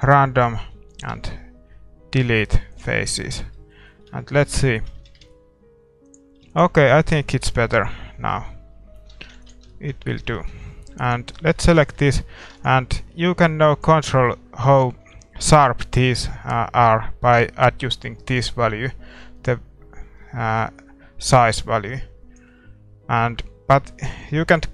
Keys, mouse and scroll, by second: 0.0 click, 0.6-2.8 middle drag, 2.8 x, 3.1 Tab, 3.3 scroll down 1, 3.5 middle click, 5.2 shift+z, 6.1-7.8 drag, 6.5 ctrl+s, 6.7-9.7 middle drag, 9.2 shift+z, 9.7 ctrl+s, 11.0-13.5 right drag, 13.5 ctrl+s, 13.5-15.3 drag, 14.3-17.0 middle drag, 14.7 shift+z, 18.3-20.0 drag, 23.7-24.7 middle drag.